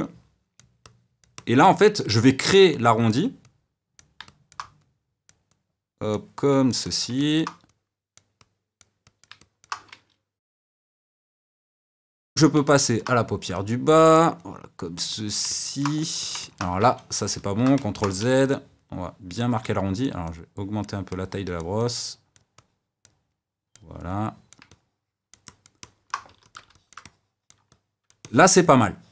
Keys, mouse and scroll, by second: 4.2 middle click, 4.8-7.1 drag, 7.1 middle click, 7.7-9.4 drag, 9.4-10.7 middle drag, 10.7 d, 10.9-12.3 middle drag, 12.3 ctrl+z, 12.6 middle click, 13.5-15.5 drag, 15.5 middle click, 16.0 f, 16.4 middle click, 16.8 ctrl+z, 17.2 ctrl+z, 17.8 middle click, 18.2 f, 19.0 click, 19.5 f, 20.2-24.7 drag, 24.7-26.3 middle drag, 26.3 f, 26.7-29.1 shift+middle drag.